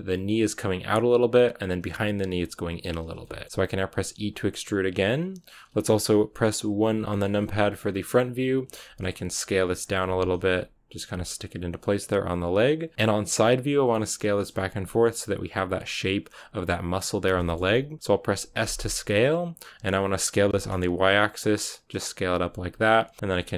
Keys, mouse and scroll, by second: 2.9 scroll down 2, 3.1 shift+middle click, 6.9 KP_1, 7.8-8.6 scroll up 2, 8.6-11.0 typing, 12.2 KP_3, 12.9-18.5 shift+middle drag, 18.5 s, 22.9 r, 23.2 g.